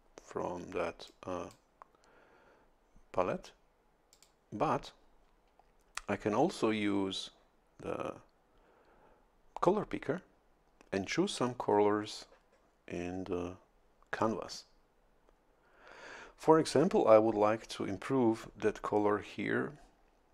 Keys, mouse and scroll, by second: 1.1 click, 1.7-3.5 scroll up 1, 4.1 click.